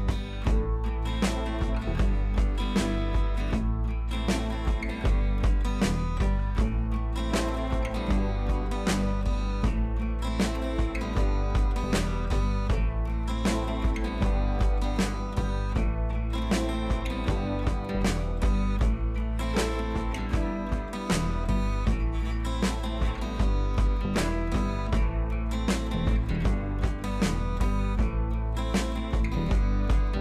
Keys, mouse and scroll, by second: 0.1 t, 0.5 click, 3.1-3.6 click, 3.8 ctrl+c, 4.2 click, 4.8 ctrl+b, 6.2 ctrl+click, 6.7 ctrl+t, 7.1 click, 8.4 ctrl+t, 8.9-10.1 drag, 13.4-13.9 scroll up 1, 14.1-14.6 drag, 23.0-23.5 scroll down 1, 23.9-24.6 drag, 25.5 ctrl+t, 26.0-26.6 alt+drag, 29.0-29.5 alt+click, 29.7-30.1 click.